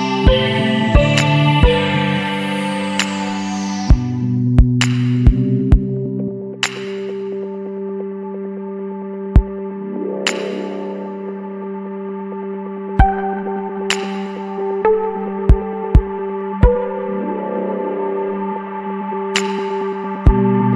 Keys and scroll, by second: 8.5 Return, 9.2 space, 11.4 space, 16.4 ctrl+-.